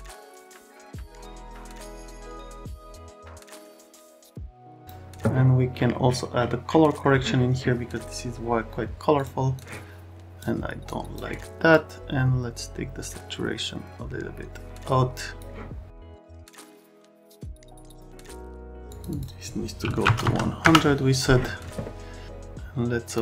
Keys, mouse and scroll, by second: 0.0 click, 0.2 click, 0.5 click, 1.2 click, 1.6 click, 1.8 click, 2.0 click, 2.2 click, 2.7 click, 3.3 click, 3.9 click, 4.1 click, 4.8 click, 9.1 click, 9.5 click, 10.8 click, 11.7 click, 19.8 KP_1, 20.0 KP_0, 20.6 Return.